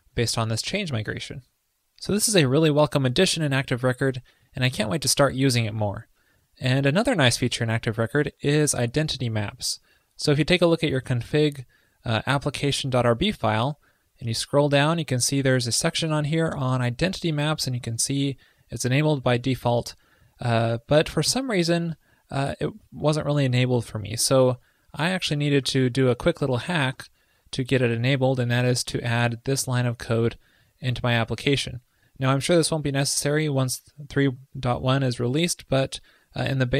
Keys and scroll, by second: 26.9 super+v.